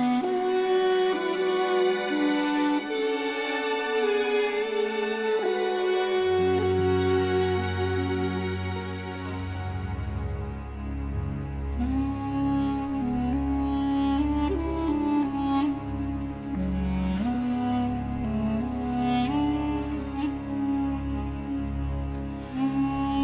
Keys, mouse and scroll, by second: 0.2 click, 1.8 scroll up 1, 2.4 scroll down 1, 4.0 Escape, 4.7-5.9 drag, 6.7 click, 8.1 click, 8.8-9.8 typing, 10.8 click, 11.5-12.4 typing, 13.4 click, 14.5 click, 15.1 Escape, 15.9 scroll down 2, 16.4 scroll up 2, 17.6-19.6 drag, 20.4 click, 22.2 Escape.